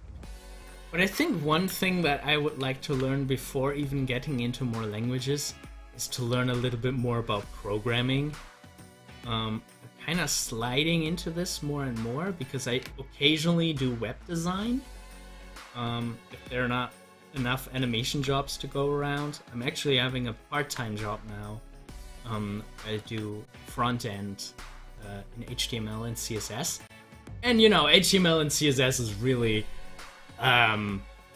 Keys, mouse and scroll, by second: 2.6 ctrl+z, 6.4 ctrl+z, 8.5 ctrl+z, 15.0 ctrl+z, 18.1 z, 18.7-20.7 drag, 20.7 ctrl+z, 23.0 z, 23.9-28.8 drag.